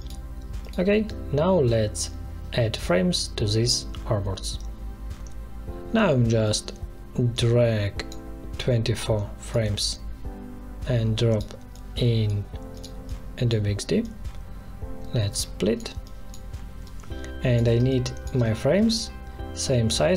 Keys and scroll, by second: 17.7 space.